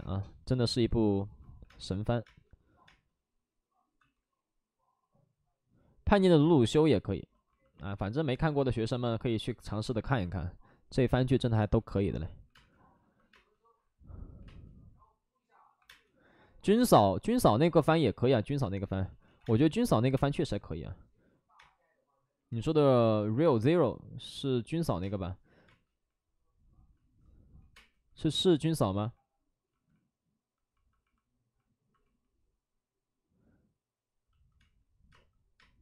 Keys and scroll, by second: 1.5 3, 1.6 space, 2.2 space, 2.8 space, 3.9 ctrl+z, 6.3 space, 9.7 space, 12.4 1, 12.4 space, 14.3 space, 15.5-16.2 typing, 16.7 ctrl+z, 19.3 ctrl+z, 19.4 space, 20.3 5, 21.5 space, 23.4 3, 24.9 space, 25.6 space, 26.9 ctrl+z, 27.5 5, 27.6 space, 28.8 ctrl+z, 34.5 space, 35.0 space, 35.5 space.